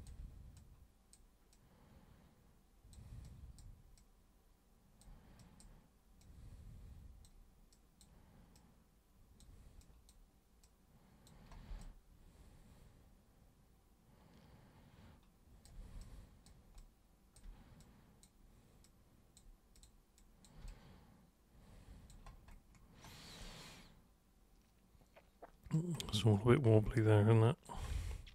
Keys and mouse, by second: 0.6-1.1 super+drag, 1.5-2.9 super+drag, 3.2-3.6 super+drag, 3.9-5.0 super+drag, 5.4 super+drag, 6.2-7.2 super+drag, 7.7 super+click, 8.5 super+click, 9.8 super+click, 10.6 super+click, 11.8-15.6 alt+super+drag, 15.9 alt+super+click, 16.7 alt+super+click, 17.7-18.2 super+drag, 18.8 super+click, 19.7 super+click, 20.2 super+click, 20.7-22.0 alt+super+drag, 23.4-25.7 alt+super+drag, 26.9 alt+super+click.